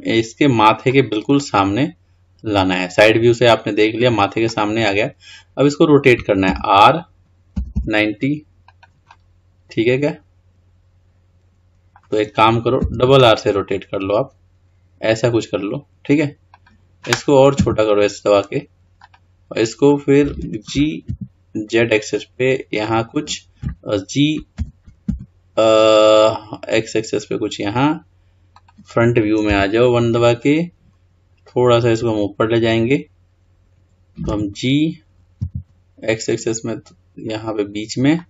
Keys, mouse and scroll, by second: 1.5-6.6 middle drag, 6.6 r, 9.2-12.3 middle drag, 19.2 s, 24.7 g, 29.6 KP_1, 30.6-31.9 scroll up 2.